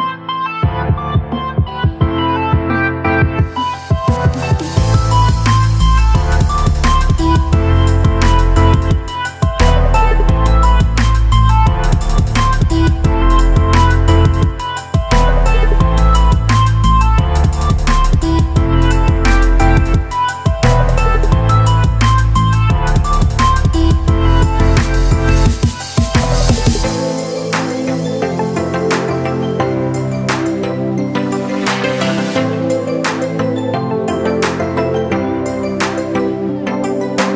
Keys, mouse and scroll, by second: 18.5 space, 18.6 click, 19.0 space, 20.6 space, 22.4 click, 25.0 click, 26.7 space, 27.0 click, 27.2 space, 28.0 alt+click, 32.2-36.0 drag, 32.2 a.